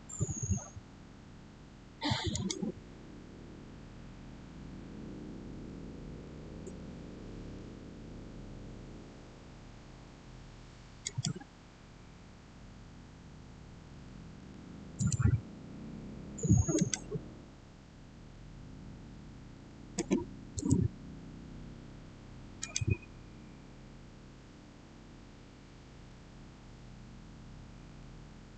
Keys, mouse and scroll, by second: 2.2 click, 6.1 click, 6.2-6.5 typing, 7.3 Return, 10.9 click, 13.9-14.3 typing, 14.8 Return, 16.6 click, 19.4-19.8 typing, 20.4 Return, 22.5 click, 27.7-28.0 typing.